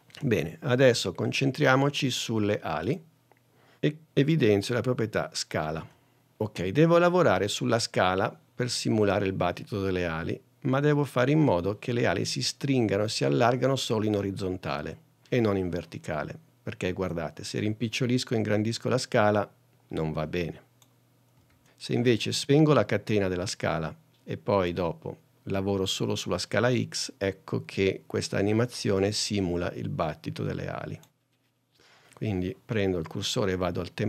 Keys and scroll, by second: 6.0 s, 21.6 super+z, 31.6 super+z.